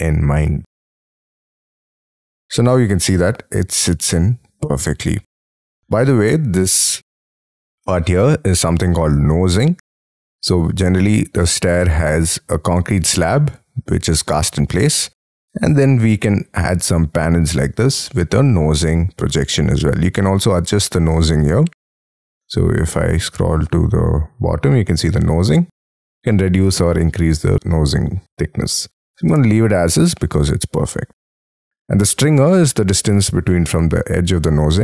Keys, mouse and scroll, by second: 2.2-3.0 scroll up 18, 3.0 middle click, 5.2-5.5 scroll down 4, 5.5-6.4 scroll up 17, 10.5-11.1 scroll down 10, 11.1 scroll up 5, 11.3 middle click, 18.0 middle click.